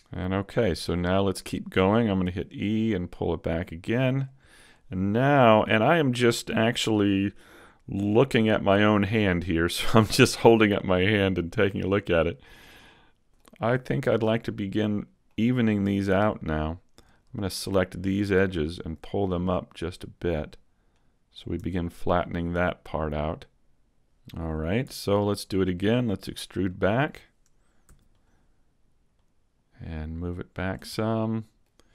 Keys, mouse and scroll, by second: 0.8-1.1 scroll down 1, 1.1 middle click, 2.2 e, 2.6 click, 3.5 click, 4.5 middle click, 8.5 middle click, 10.4 middle click, 13.6-14.6 scroll up 3, 14.0 shift+middle click, 14.7 middle click, 16.1 right click, 17.1 shift+right click, 18.7 right click, 19.7 click, 21.6 Tab, 21.9 scroll down 3, 22.2 middle click, 24.3 Tab, 24.3 scroll down 1, 25.4 alt+right click, 25.7 middle click, 26.3-26.7 scroll down 2, 26.7 middle click, 27.9 e, 29.1 click, 30.9 middle click.